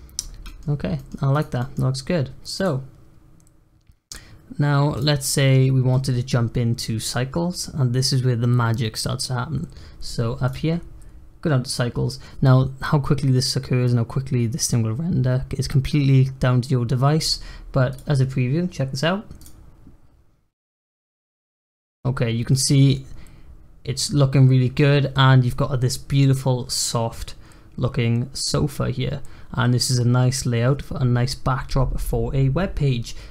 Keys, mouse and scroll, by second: 0.4 middle click, 1.2 click, 1.5-2.5 middle drag, 2.5 click, 3.5-4.5 scroll up 2, 4.5-4.9 scroll up 2, 4.9 click, 5.2-8.2 scroll up 1, 10.4 click, 10.7-13.8 scroll up 1, 17.8-20.8 drag.